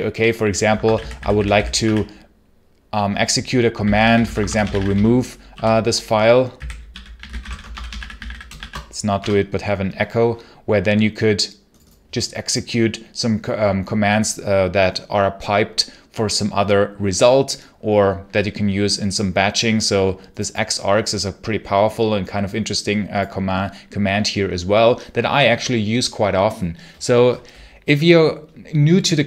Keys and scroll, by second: 0.5-2.2 typing, 3.4-8.9 typing, 9.0 Return.